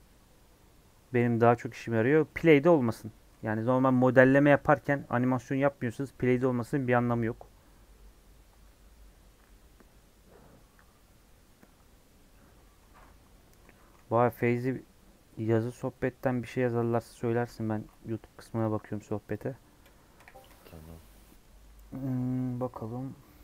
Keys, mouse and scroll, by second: 2.2 middle click, 2.7-3.1 scroll up 2, 3.1-18.8 middle drag, 18.8-19.3 scroll up 1, 19.3 click, 19.8 KP_3, 20.1 KP_1, 20.4 KP_Decimal, 21.2 middle click, 21.4-21.8 scroll down 4, 21.8 middle click, 22.0 scroll up 3, 22.4 scroll down 1, 22.5-23.4 middle drag.